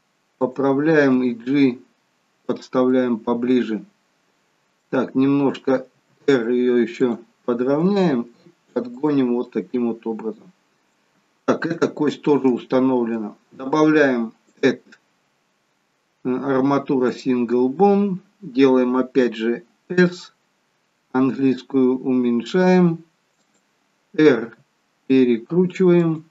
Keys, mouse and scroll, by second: 1.0 g, 2.7 middle click, 5.9 r, 7.8 g, 9.3 middle click, 11.7 shift+middle click, 14.5 click, 17.8-19.8 scroll down 1, 19.8-20.8 scroll down 2, 19.8 s.